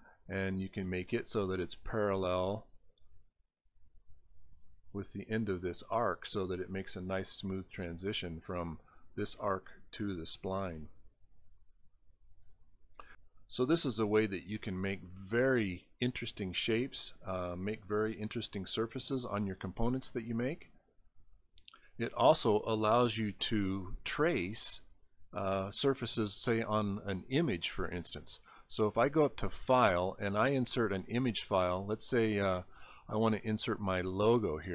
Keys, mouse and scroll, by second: 0.4-1.8 drag, 0.4-4.7 right drag, 5.9 scroll down 3, 7.7 click, 10.4-11.2 scroll up 13, 12.3 scroll up 5, 24.2 scroll down 3, 27.7 click, 32.7 click, 34.4 click.